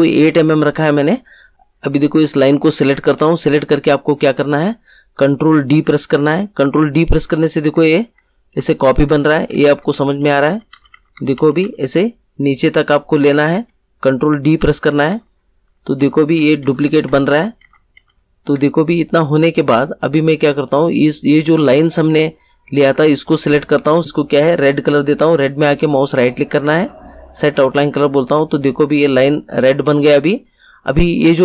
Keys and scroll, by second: 6.5 ctrl+d, 14.5 ctrl+d.